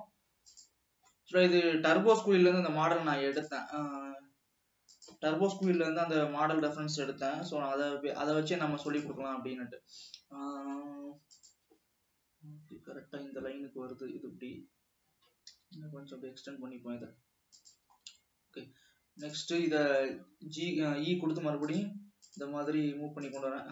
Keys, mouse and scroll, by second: 0.7 click, 1.5-2.2 middle drag, 2.2-2.9 scroll up 1, 2.9 e, 4.1 s, 5.8 KP_3, 6.7 scroll up 2, 7.5 g, 11.9-14.6 drag, 15.7 g, 18.2-18.8 scroll down 2, 18.8 scroll down 1, 19.6 click, 19.8 middle click, 20.6 e.